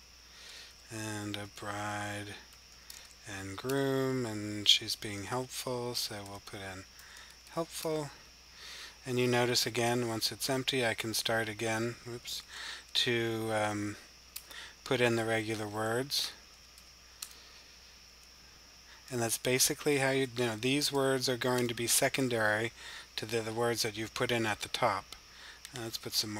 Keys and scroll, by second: 0.0-3.3 typing, 4.6-10.3 typing, 12.2 super+e, 13.4 o, 15.0-16.6 typing, 18.6-20.9 typing.